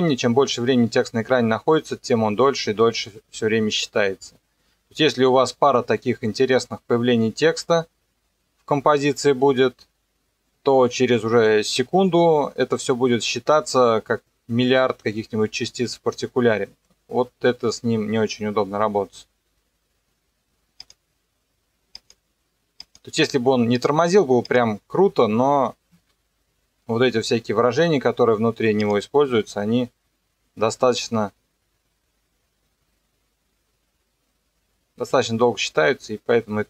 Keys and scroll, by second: 19.4 KP_0, 25.9 KP_0, 29.3 KP_0, 30.5 KP_0.